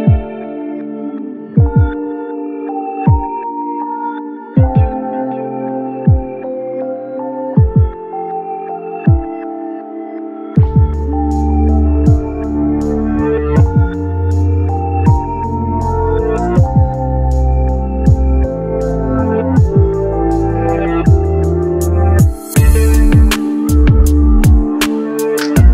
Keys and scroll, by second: 24.1 ctrl+c.